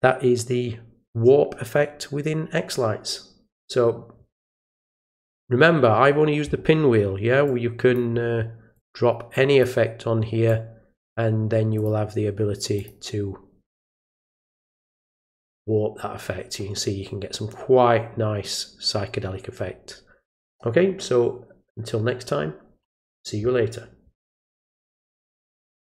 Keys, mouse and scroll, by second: 7.4 click, 8.7 click, 10.4 click, 11.7 click, 12.7 click, 15.1 click, 25.9 click.